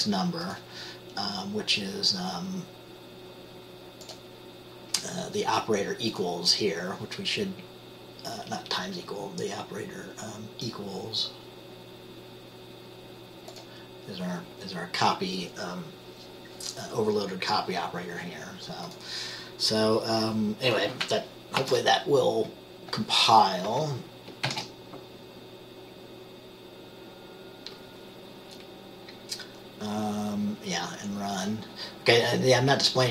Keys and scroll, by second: 21.7 ctrl+s, 24.6 ctrl+b.